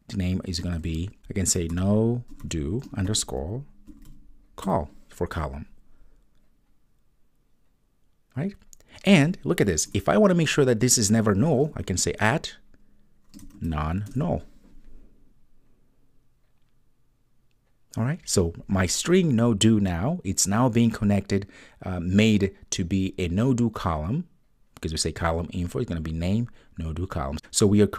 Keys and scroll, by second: 14.1 Return.